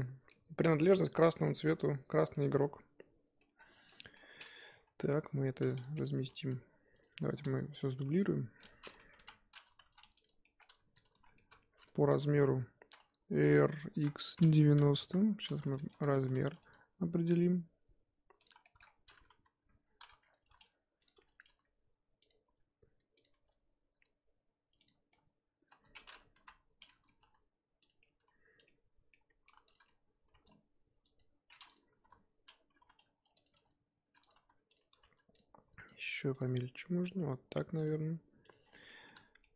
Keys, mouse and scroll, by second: 3.5-3.8 scroll down 3, 3.8 middle drag, 4.1-4.7 scroll up 3, 4.8-5.8 scroll up 8, 5.0 KP_1, 5.8 click, 6.1 g, 7.3-7.7 scroll down 3, 7.9 click, 8.1 scroll down 2, 8.2 middle click, 9.2 KP_1, 9.8 shift+d, 10.4 shift+middle drag, 10.7-11.0 scroll up 1, 11.0 click, 11.2 scroll down 1, 11.3-12.1 shift+middle drag, 12.1 KP_7, 13.9 r, 15.2-15.7 scroll down 3, 15.7-16.1 shift+middle drag, 16.1 g, 18.6 shift+middle drag, 18.8-19.8 scroll up 1, 19.8-20.4 scroll up 3, 20.4 r, 21.1 g, 25.1-26.3 middle drag, 26.3 KP_1, 27.2 g, 28.0-29.1 middle drag, 29.1 scroll down 1, 29.1-29.6 middle drag, 29.6 click, 30.2 g, 31.7 click, 32.0 KP_7, 32.7 r, 38.0-38.5 scroll down 2, 38.5 click, 38.6 scroll down 2, 38.8 shift+middle click.